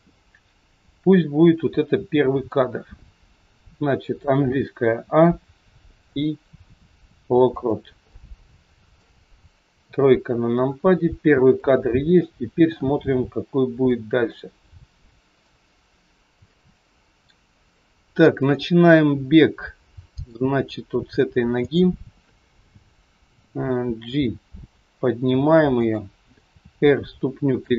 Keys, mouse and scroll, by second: 5.0 a, 6.0 i, 8.1 middle click, 9.9 KP_3, 10.2 scroll down 2, 11.1 scroll down 1, 11.5 shift+middle click, 16.5 middle click, 17.7 middle click, 21.5 click, 24.6 g.